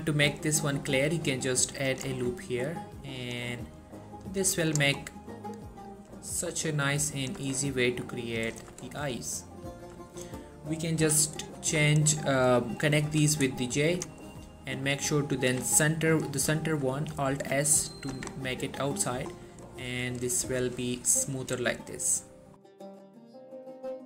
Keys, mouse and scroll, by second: 2.0 click, 2.2 Tab, 3.6-4.0 scroll down 1, 4.4-4.8 scroll down 1, 4.8 click, 5.1-5.5 scroll up 2, 6.6-7.1 scroll up 1, 7.3 click, 7.5 Tab, 8.6 click, 9.3-9.9 middle click, 10.2 shift+click, 11.1 j, 11.7 click, 12.1 shift+click, 13.1 j, 13.5 middle click, 13.8-14.1 scroll up 1, 14.1 click, 14.3 middle click, 14.5 scroll up 1, 14.8 middle click, 15.4 alt+s, 16.2 right click, 16.7 middle click, 17.4 alt+s, 18.1 click, 18.3 Tab, 18.4 scroll down 1, 18.6-19.5 middle click, 19.8-20.3 scroll down 1, 20.3 middle click, 20.6 1, 21.5 click, 21.9 scroll down 1, 22.1 typing.